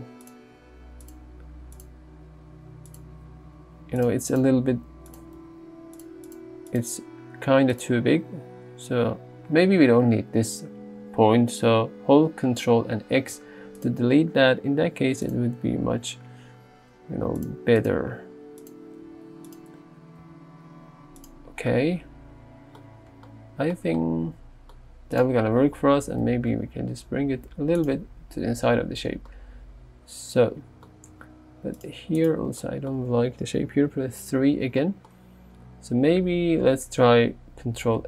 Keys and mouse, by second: 0.5 r, 1.2 s, 1.8 click, 2.4 r, 3.0 click, 3.5 s, 4.1 click, 4.4 click, 4.7 s, 5.1 click, 5.4 g, 6.0 click, 7.8 click, 13.2 ctrl+x, 13.8 click, 15.3 click, 16.0 g, 18.2 s, 18.7 click, 19.1 r, 19.5 click, 20.3 g, 21.2 click, 26.3 g, 26.6 z, 27.8 click, 29.2 Tab, 31.2 Tab, 33.7 KP_3, 37.9 ctrl+x.